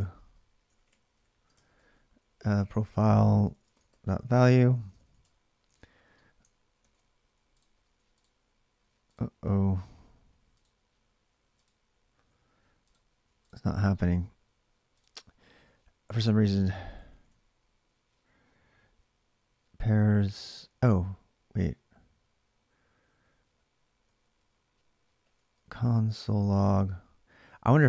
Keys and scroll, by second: 0.0-5.2 typing, 5.5 alt+Tab, 6.6 ctrl+r, 7.3-8.6 typing, 10.1 typing, 11.2-13.6 typing, 13.7 alt+Tab, 16.4 ctrl+[, 16.6 k, 16.7 k, 20.2 j, 20.3 j, 23.8-27.8 typing.